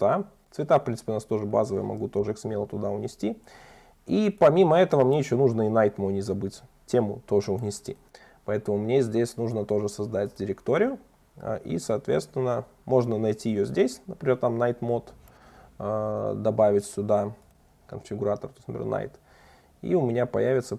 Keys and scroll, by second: 3.1 super+1, 7.2 super+1.